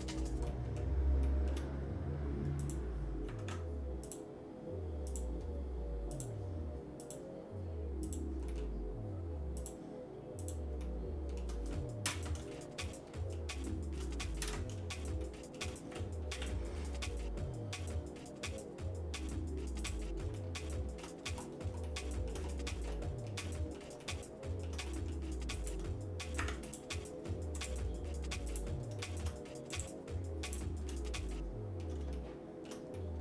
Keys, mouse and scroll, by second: 0.5 shift+middle click, 1.2 shift+middle click, 2.6 click, 3.4 ctrl+Tab, 5.1 click, 6.1 shift+click, 7.0 shift+click, 8.2 shift+click, 8.5 shift+middle click, 9.6 shift+click, 10.7 shift+click, 10.8 shift+middle click, 12.0 ctrl+KP_Add, 12.9 shift+middle click, 14.4 ctrl+KP_Add, 15.2 shift+middle click, 16.3 p, 20.3 shift+middle click, 21.2-21.7 scroll down 2, 21.8 shift+middle click, 22.5 middle click, 22.9 shift+middle click, 23.5 middle click, 24.0 shift+middle click, 24.9 middle click, 25.6 shift+click, 26.4 Tab, 26.7 click, 27.6-28.7 right drag, 29.0 shift+middle click, 29.7 right click, 31.1 shift+middle click, 32.2 shift+middle click, 32.9 middle click.